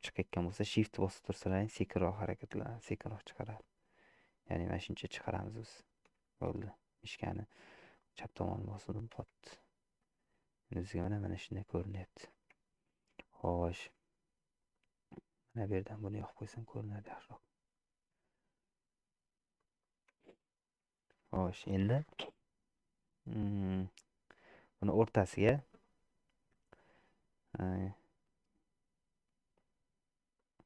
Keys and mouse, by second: 8.5 middle click, 9.3 Tab, 10.1 middle click, 10.9 click, 11.0 middle click, 11.3 middle click, 12.7 shift+middle click, 13.2 middle click, 14.9-17.1 drag, 17.8-19.2 middle drag, 19.6 middle click, 20.3 Tab, 21.0 shift+middle click, 23.1 middle click, 24.1 middle click, 30.4 click.